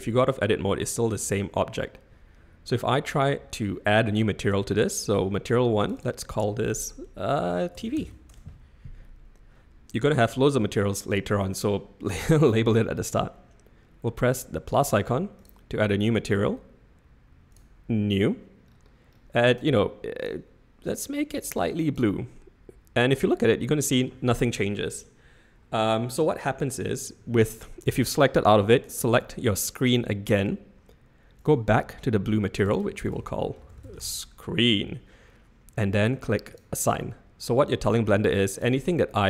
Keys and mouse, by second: 1.1 Tab, 5.8-9.3 drag, 15.4 click, 17.5 click, 20.2 click, 23.1 middle click, 29.0 click, 31.4 click, 32.5 click, 32.7-34.7 drag, 33.8 e, 36.5 click, 37.4 middle click, 38.8 middle click.